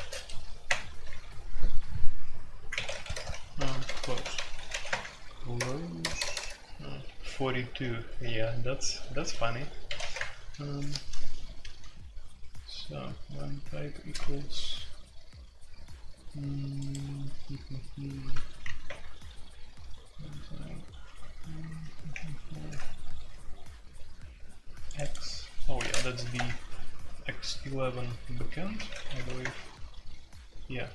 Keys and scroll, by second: 0.0-0.6 typing, 2.7-10.5 typing, 18.8 shift+Page_Up, 21.1 shift+Page_Up, 21.7 shift+Page_Up, 22.1 shift+Page_Up, 25.7 typing, 26.1 shift+Insert, 26.3 Return, 28.4-29.2 typing, 29.4 Return, 30.6-30.9 typing.